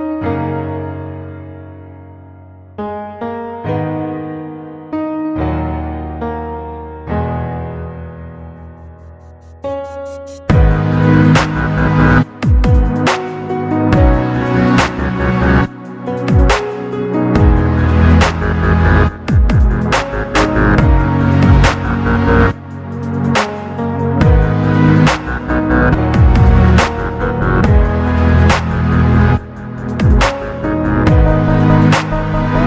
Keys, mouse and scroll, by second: 2.9-4.4 drag, 5.1 KP_7, 5.7-7.2 scroll up 5, 7.2 Tab, 8.6 1, 10.4-12.5 drag, 13.6 s, 17.0 click, 18.6 Tab, 19.1-19.8 middle drag, 20.3 KP_Decimal, 23.9 click, 25.2-26.8 drag, 27.0-28.7 drag, 29.2-29.9 scroll down 2, 29.6-32.2 middle drag, 32.4-32.6 drag.